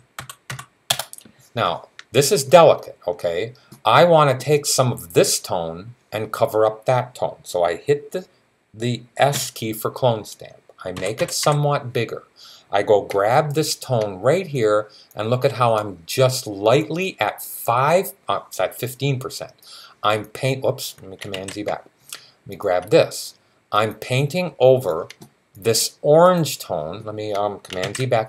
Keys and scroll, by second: 0.0-0.8 typing, 9.1 s, 10.5-11.7 typing, 21.1 super+z, 27.7 super+z.